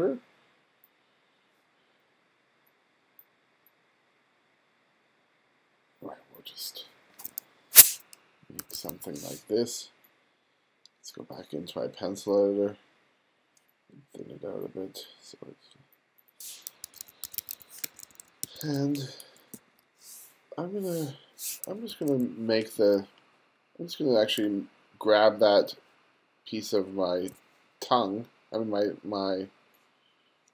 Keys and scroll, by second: 8.6 2, 16.9 1, 17.9 2, 18.4 1, 19.6 super+v, 21.9 2.